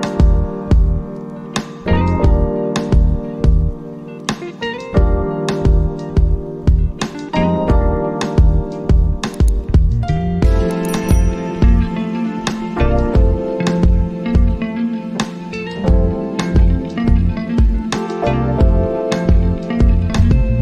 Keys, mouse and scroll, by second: 0.9 click, 2.2 right click, 2.9-5.4 drag, 6.7 click, 12.1 click.